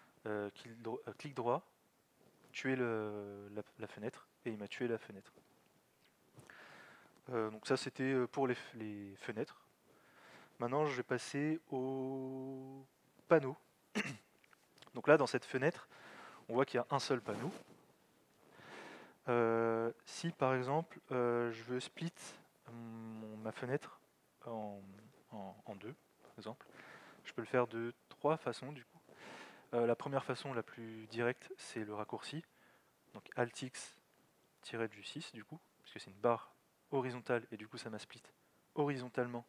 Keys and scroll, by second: 33.4 alt+x.